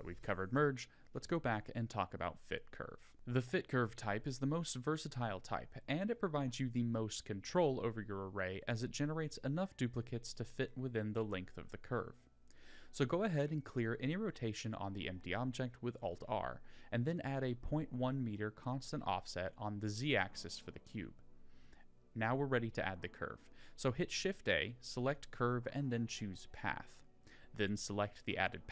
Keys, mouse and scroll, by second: 0.9 alt+r, 1.7-2.1 middle drag, 2.2 scroll down 2, 3.1 click, 5.2-6.2 drag, 10.5 click, 12.9 click, 16.9 click, 18.3-21.1 drag, 21.3 click, 22.0 shift+a, 26.5 middle click, 27.1 Tab.